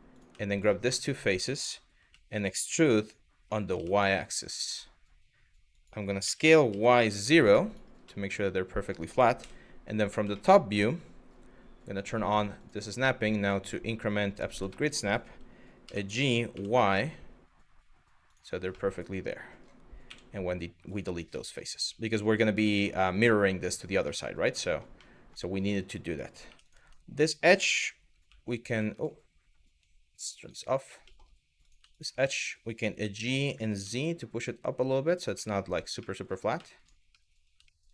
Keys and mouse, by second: 0.6 middle click, 1.6 e, 3.4 y, 5.3 click, 5.9 s, 7.3 click, 7.8 middle click, 9.0 KP_7, 10.0 middle click, 11.9 click, 12.2-13.8 drag, 14.4 shift+middle click, 15.5 g, 16.1 y, 17.9 click, 18.4 middle click, 19.7 x, 21.1 middle click, 21.6 middle click, 22.3 middle click, 22.9 middle click, 23.7 middle click, 24.3 shift+middle click, 24.7 middle click, 26.1 2, 26.3 click, 27.9 g, 30.0 click, 30.7 middle click, 31.2 click, 31.5 shift+click, 31.9 middle click, 32.6 g, 33.5 z, 34.7 click, 35.1 middle click, 35.6 middle click, 36.3 middle click, 36.8 middle click, 37.4 shift+middle click, 37.8 middle click.